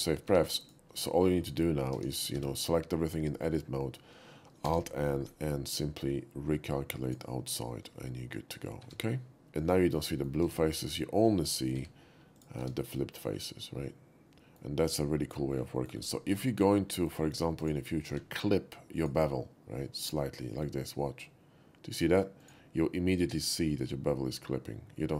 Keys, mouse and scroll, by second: 0.4 Tab, 0.7 click, 1.1 shift+middle click, 1.9 Tab, 2.4 a, 4.7 alt+n, 7.1 click, 8.9 Tab, 9.9 shift+middle click, 10.2 shift+middle click, 10.5 Tab, 10.9 click, 11.8 x, 12.4 click, 12.6 Tab, 13.0-14.6 middle drag, 15.8 middle click, 16.3-16.9 middle drag, 17.7 click, 18.2 q, 19.0 click, 22.4 click, 25.0-25.1 middle drag.